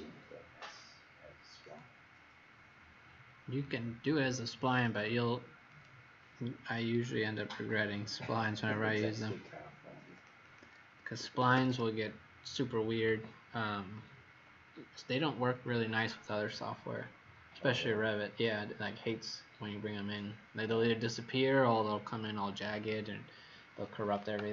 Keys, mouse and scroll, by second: 1.6 click, 7.1-7.9 scroll down 5, 8.1-8.9 scroll down 3, 9.0 scroll down 1, 10.1 click, 10.4 click, 11.1 Escape, 11.3 Escape, 11.6 Escape, 11.7 Escape.